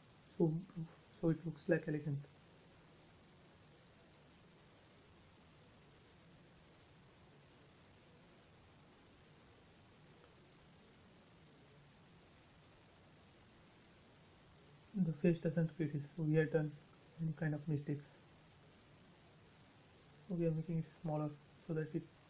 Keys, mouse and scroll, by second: 0.9 click, 2.2-3.3 scroll up 1, 8.6 click, 8.8 space, 9.1-9.5 scroll up 1, 9.6 shift+middle click, 10.8 click, 15.2 Delete, 16.1 a, 16.8 click, 21.1 click, 21.5 space, 21.8 scroll up 1.